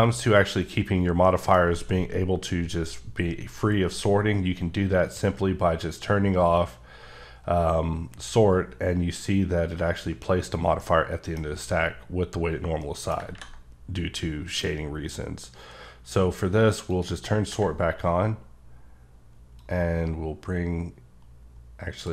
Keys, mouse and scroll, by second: 1.3 middle click, 10.8 middle click, 17.0 click, 19.6-22.1 drag.